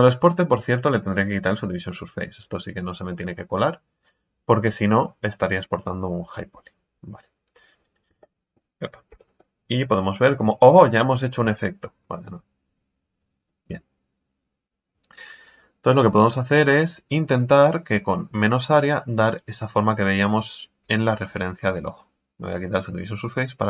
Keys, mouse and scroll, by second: 5.3 middle click, 6.1-8.0 drag, 8.2 middle click, 9.1 Tab, 9.4-11.4 middle drag, 11.4 Tab, 12.3 ctrl+z, 12.7 ctrl+z, 13.0 ctrl+z, 13.4-14.9 middle drag, 14.9 KP_3, 16.2-19.3 drag, 21.1-21.8 scroll down 2, 22.5 click, 23.2-23.6 middle drag.